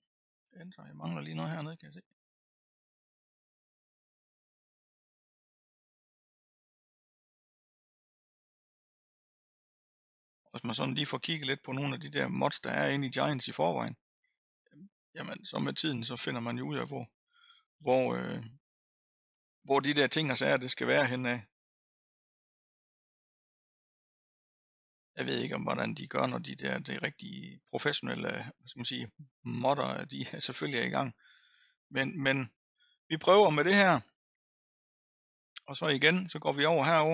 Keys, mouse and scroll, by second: 2.6-5.6 drag, 6.9-15.6 drag, 15.6-16.8 middle drag, 16.8-17.9 scroll up 7, 17.9 middle click, 18.7-19.7 scroll down 4, 19.7-24.9 middle drag, 24.9 click, 26.2-27.4 scroll down 6, 27.4 middle click, 27.7-28.7 scroll down 5, 28.7 middle click, 29.4-30.8 scroll up 1, 30.8 scroll down 2, 31.2-32.5 scroll up 2.